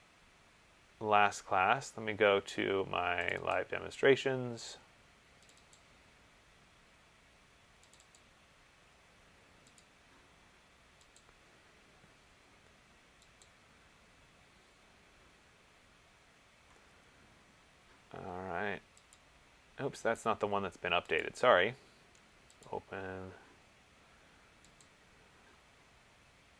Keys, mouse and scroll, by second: 3.5 click, 3.7 click, 5.7 click, 6.0 click, 8.1 click, 8.4 click, 10.0 click, 11.4 click, 13.7 click, 19.3 click, 20.3 click, 21.3 click, 22.9 click.